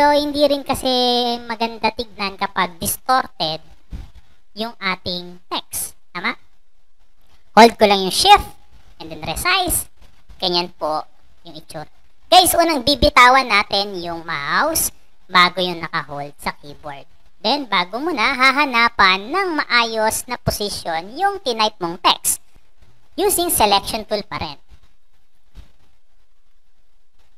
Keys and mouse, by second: 17.1-22.9 drag, 24.9 click.